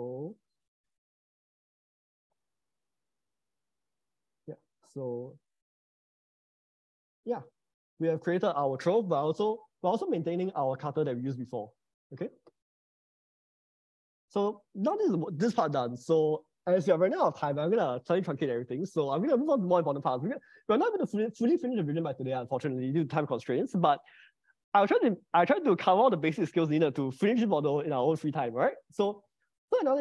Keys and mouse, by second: 0.4 click, 2.6 middle click, 4.2 click, 4.8 click, 7.8 middle click, 13.8-15.6 middle drag, 29.6-30.0 middle drag.